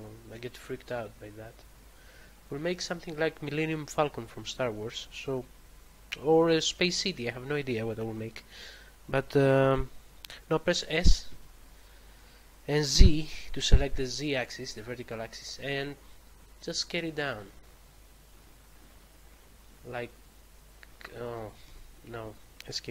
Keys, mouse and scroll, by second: 11.2 s, 12.9 z, 20.0 middle click, 21.6 Escape.